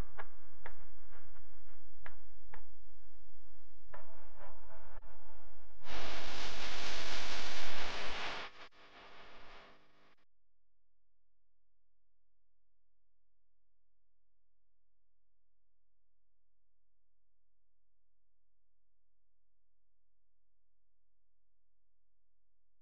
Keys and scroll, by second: 4.0 v, 15.5 v.